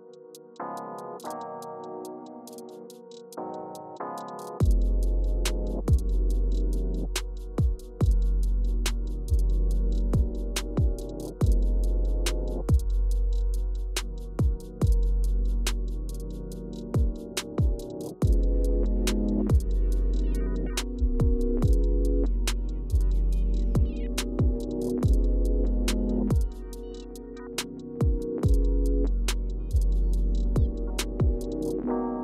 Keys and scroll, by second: 0.0-1.8 Page_Down, 0.5 Up, 2.5-4.0 typing, 4.0 Home, 10.6-11.5 typing, 13.5 typing, 25.4-26.7 typing.